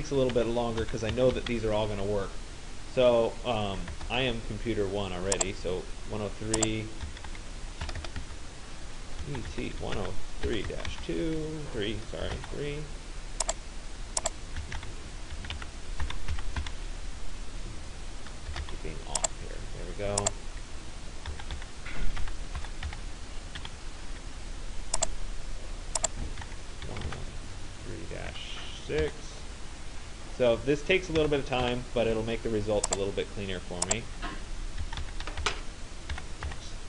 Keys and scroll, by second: 0.0-1.8 typing, 4.0 2, 6.8-7.8 typing, 8.1 Caps_Lock, 9.0-12.4 typing, 14.4-17.1 typing, 18.5 BackSpace, 18.6 4, 21.3-23.6 typing, 26.0-29.0 typing, 31.2 -, 31.6 6, 34.6-36.8 typing.